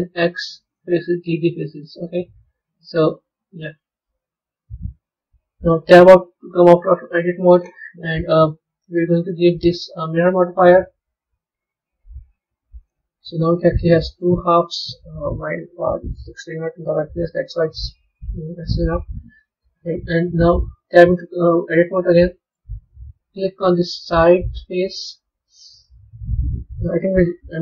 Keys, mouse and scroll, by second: 1.3-2.5 middle drag, 2.5-3.1 scroll down 2, 3.1-4.5 scroll up 3, 4.5 KP_1, 5.8 Tab, 6.6 z, 9.1 click, 10.0-13.0 drag, 13.3-15.7 middle drag, 15.7 KP_3, 16.8 KP_1, 17.4-20.2 scroll up 3, 20.2 b, 21.1-21.6 scroll down 1, 21.6-24.8 middle drag, 24.8-26.4 scroll down 1, 26.4 Tab.